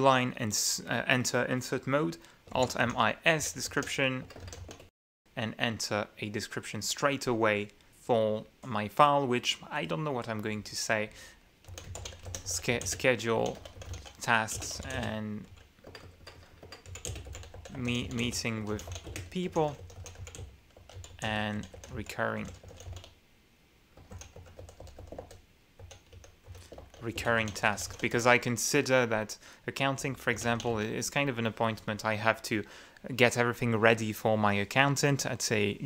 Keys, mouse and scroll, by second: 2.9 alt+m, 3.2 alt+i, 3.8 alt+d, 4.0 alt+s, 4.0 alt+e, 4.6 alt+BackSpace, 4.8 alt+e, 4.9 alt+s, 5.1 alt+Return, 11.8-28.8 typing, 30.6-31.5 typing.